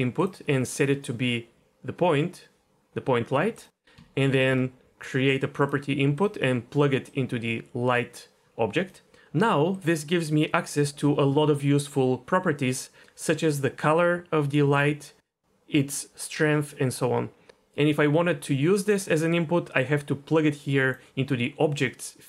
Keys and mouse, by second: 0.9-3.6 drag, 4.3 shift+a, 7.3-8.9 drag, 9.7-17.4 drag, 18.9 click, 19.5-20.9 drag.